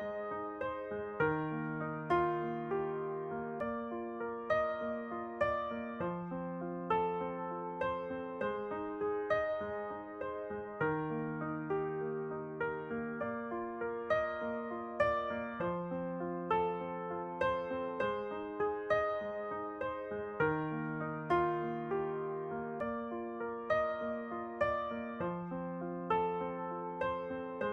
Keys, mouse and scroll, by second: 1.3 alt+s, 8.0 Tab, 8.3-10.1 middle drag, 10.1 shift+space, 12.0-13.0 drag, 14.0-15.9 drag, 14.6 shift+space, 15.9 middle click, 17.2 Tab, 17.7-20.1 middle drag, 21.1 Tab, 24.6-27.6 middle drag, 26.5 a.